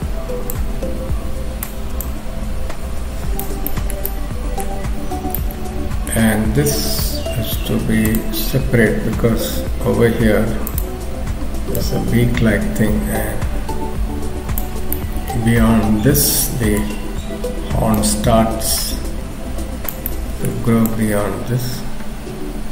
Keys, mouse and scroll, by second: 0.5 click, 2.0 click, 3.7 shift+middle click, 4.1 middle click, 8.1 click, 9.4 f, 11.8 click, 14.8-15.4 scroll down 3, 15.0 middle click, 16.9-17.6 scroll up 2, 18.0 click, 18.0-19.2 scroll up 1, 20.1 middle click, 20.9 click.